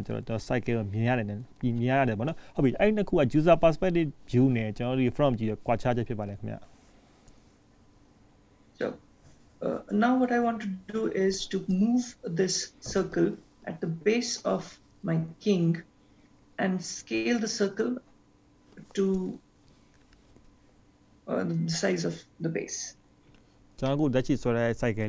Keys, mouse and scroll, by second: 1.7-2.2 scroll up 2, 2.2 shift+middle click, 3.8 scroll up 1, 15.2-16.0 scroll down 3, 16.0 scroll up 3, 24.3 shift+middle click.